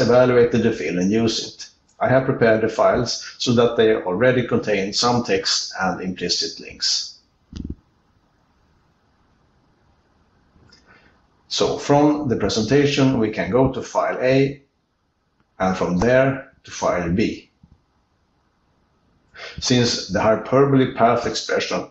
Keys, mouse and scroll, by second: 3.2 c, 3.5 ctrl+n, 3.7 ctrl+n, 4.6 ctrl+e, 6.0 ctrl+e, 9.0 ctrl+p, 9.2 ctrl+p, 9.5 ctrl+p, 9.9 ctrl+p, 11.0 ctrl+b, 11.4 ctrl+b, 11.6 ctrl+b, 13.3 alt+Return, 15.3 r, 16.5 ctrl+n, 16.8 ctrl+n, 17.0 ctrl+n, 18.8 ctrl+e, 18.8 ctrl+b, 19.0 ctrl+b, 19.2 ctrl+b, 19.4 ctrl+b, 20.9 alt+Return.